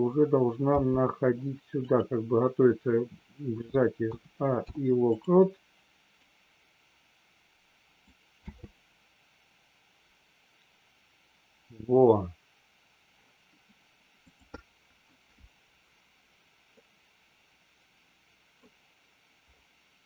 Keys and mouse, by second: 0.7 g, 1.7 click, 4.6 i, 6.1 click, 8.4 space, 16.7-18.6 middle drag.